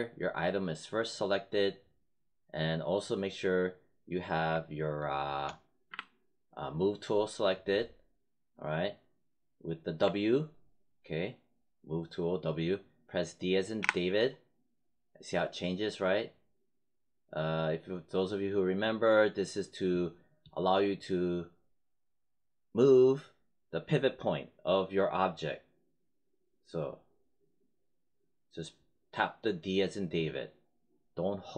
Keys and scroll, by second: 5.8 w, 13.7 d.